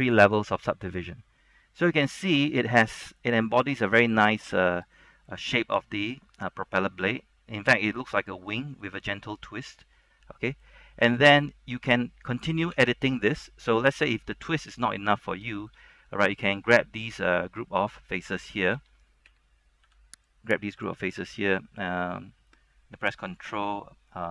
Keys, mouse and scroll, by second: 3.3-4.5 scroll up 3, 4.5-8.1 middle drag, 8.5 shift+middle click, 8.7 scroll down 1, 9.0-10.9 middle drag, 10.9-11.2 scroll down 1, 11.2 middle click, 12.9 Tab, 14.0 shift+middle click, 14.5 scroll up 1, 14.8 shift+middle click, 15.4 scroll down 1, 15.7 shift+middle click, 16.0 scroll up 1, 16.2 middle click, 17.0 shift+middle click, 18.9-20.0 typing, 20.4 click.